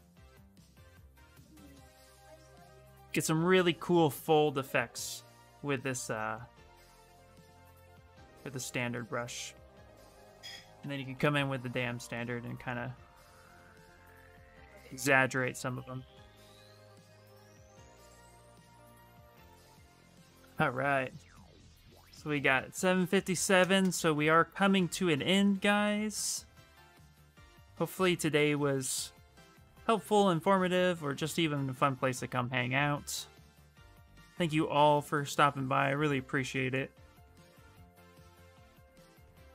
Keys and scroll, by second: 0.4 s, 10.3-11.4 typing, 24.5 s, 31.1 s, 31.9 s.